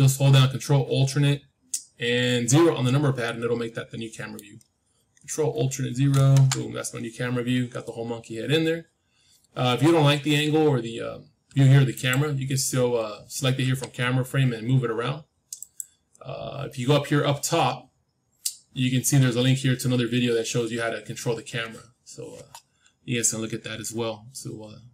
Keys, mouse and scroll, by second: 6.0 ctrl+alt+KP_0, 11.9-13.9 drag, 13.6 g.